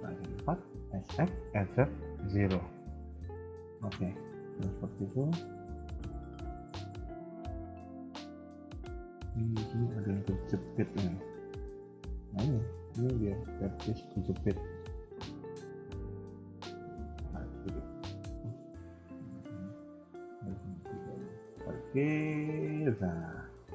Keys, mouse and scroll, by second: 0.7 s, 3.1 middle click, 4.0 KP_1, 4.3 middle click, 4.6 KP_3, 5.9 scroll up 1, 6.2 middle click, 8.2 middle click, 9.7 KP_1, 10.3 shift+middle click, 10.3 shift+middle click, 10.6 middle click, 14.5 shift+middle click, 14.8 shift+middle click, 14.9 middle click, 17.3 click, 19.3 click, 20.7 click, 20.8 ctrl+click, 21.4 g, 22.9 KP_3, 23.4 scroll down 1, 23.6 middle click.